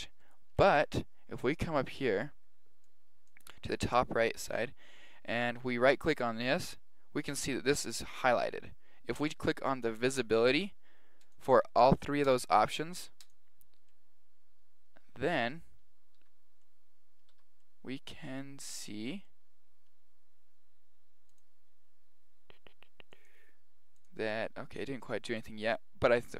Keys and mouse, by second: 2.8-4.8 drag, 5.7 right click, 11.2-14.9 drag, 13.9-15.0 middle drag, 15.0 click, 15.5-17.6 middle drag, 16.2 z, 17.3 z, 18.8-19.5 middle drag, 21.3 click, 23.1-25.9 drag, 24.5-25.8 middle drag, 25.9 middle click.